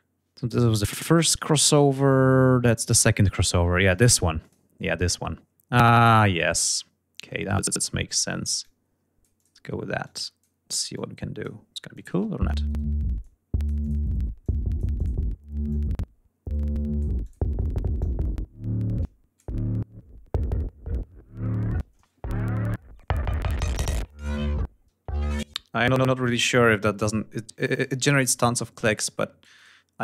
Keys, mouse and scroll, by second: 3.7 click, 4.8-5.3 scroll down 4, 6.0 scroll down 2, 6.7 click, 7.7 click, 9.2 click, 10.1 click, 11.0 click, 11.2 space, 12.2 click, 13.4 click, 14.6-16.3 drag, 16.7-18.2 drag, 18.3 ctrl+scroll down 2, 18.7 ctrl+scroll up 2, 23.8 ctrl+scroll down 2, 24.4 ctrl+space, 24.9-26.8 ctrl+drag, 26.9 ctrl+scroll down 2, 27.4 ctrl+click, 28.4 click, 29.8 click.